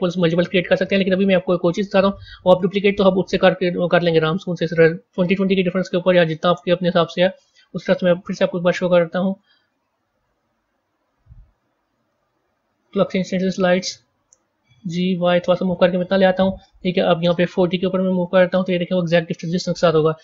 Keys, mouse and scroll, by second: 0.5-5.4 middle drag, 5.9 click, 6.4-8.3 middle drag, 8.3 shift+a, 10.3 shift+a, 14.7 g, 16.8-19.8 drag.